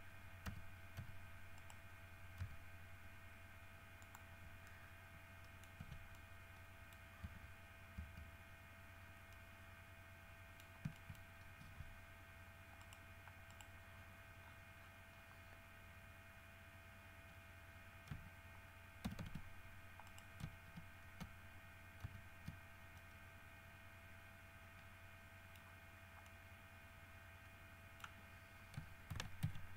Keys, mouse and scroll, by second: 0.7 g, 1.8 right click, 2.6 g, 4.2 middle click, 4.7 scroll down 2, 4.9-5.9 middle drag, 6.0 Tab, 7.3-7.6 scroll up 4, 7.4 middle click, 7.4 z, 9.2 scroll down 2, 9.5-10.8 middle drag, 10.8-11.9 scroll up 6, 11.2 shift+middle click, 11.8 shift+Tab, 13.0 middle click, 13.7 middle click, 14.6-15.3 scroll up 1, 15.5 scroll up 1, 19.2 ctrl+c, 20.3 right click, 22.2 ctrl+v, 23.2 click, 23.4-26.0 middle drag, 26.5-28.4 middle drag, 29.3 ctrl+z.